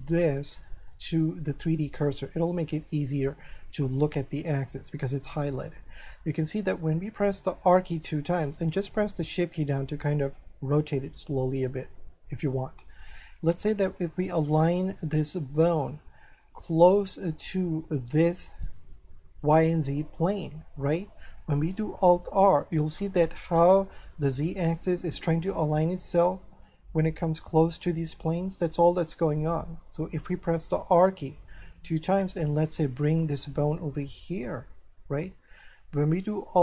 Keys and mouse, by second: 1.2 click, 2.7 click, 5.5 shift+middle click, 8.1 r, 13.0 click, 13.5 middle click, 16.2 r, 21.0 click, 22.3 alt+r, 24.9 middle click, 27.7 middle click, 29.8 middle click, 31.3 r, 33.5 click, 34.0 middle click.